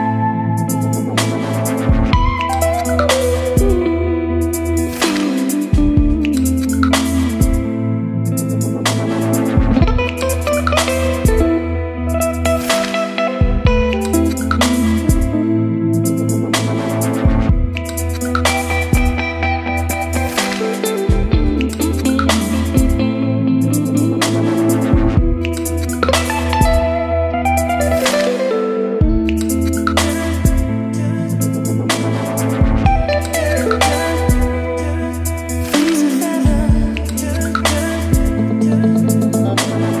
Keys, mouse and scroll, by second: 0.4 Return, 0.8-1.9 typing, 3.2-4.2 typing, 4.4 Return, 4.9 ctrl+space, 5.2 e, 5.6 Return, 7.9 ctrl+s, 8.6-21.5 drag, 21.5-22.8 typing, 23.2-24.2 drag, 24.2 Return, 25.2-27.3 typing, 28.1 click, 28.8 Return, 30.1-31.7 typing, 31.3 Return, 32.4 Return, 34.2-35.9 typing, 38.3-40.0 drag.